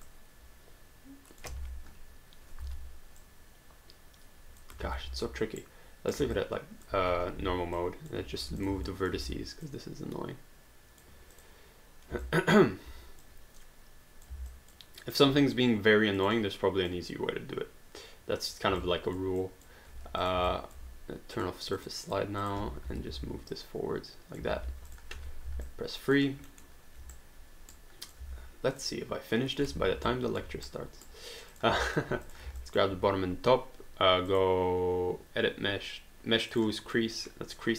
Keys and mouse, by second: 0.1 click, 1.6 ctrl+z, 2.6 r, 3.2 click, 4.8 ctrl+z, 5.6 right click, 6.3 alt+click, 7.1 1, 7.8 alt+click, 8.6 click, 8.8 alt+click, 9.2 w, 9.6 click, 11.3 click, 12.3 alt+click, 13.2 click, 14.5 alt+click, 15.4 click, 18.8 alt+click, 20.0 q, 20.2 click, 20.5 alt+click, 21.4 click, 22.9 w, 23.5 click, 24.6 alt+d, 24.9 click, 25.7 alt+click, 26.5 alt+middle click, 27.2 right click, 28.0 click, 28.2 w, 28.8 click, 29.8 ctrl+z, 30.1 alt+click, 30.5 q, 30.6 right click, 31.5 click, 31.9 alt+click, 32.2 shift+click, 32.6 alt+click, 34.3 click, 36.6 click, 36.9 middle click.